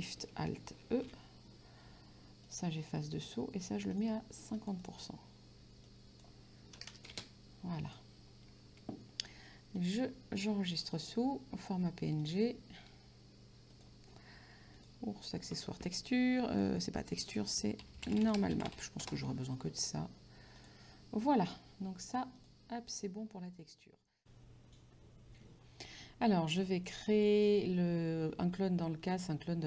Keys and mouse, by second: 2.5 click, 4.1 click, 6.2 click, 7.1 KP_0, 7.4 space, 7.9 click, 9.9 click, 11.0 click, 12.8 click, 13.8 click, 14.9 click, 17.4-19.3 typing, 20.6 click, 22.4 click.